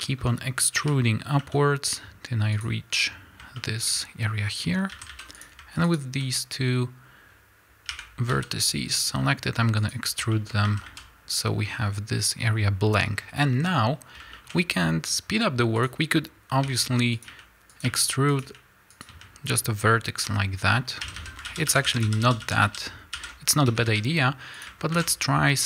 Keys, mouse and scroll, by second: 0.7 e, 2.6 click, 3.5-5.3 shift+middle drag, 4.8 a, 5.3 click, 5.9 shift+click, 7.8 e, 10.2-15.7 shift+middle drag, 10.6 a, 13.1-13.4 scroll down 2, 13.4-14.2 scroll up 2, 14.2 scroll up 1, 16.0 click, 16.0-16.5 scroll up 1, 16.5 e, 17.1 click, 17.2 e, 19.7 click, 20.1 a, 21.4 ctrl+z, 23.6 a, 24.5 click.